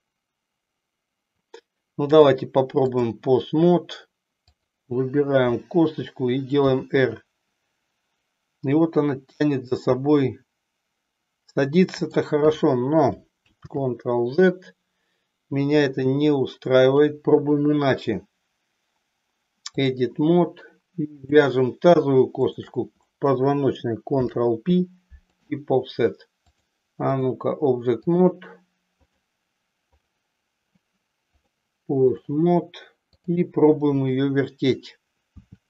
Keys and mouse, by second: 1.9-3.2 drag, 4.4 click, 6.4 r, 13.7 ctrl+z, 16.8-20.1 drag, 21.1 click, 22.6 shift+click, 24.2 ctrl+p, 26.3 click, 28.1 click, 30.1 click, 31.5 click, 33.2 click, 35.2 r.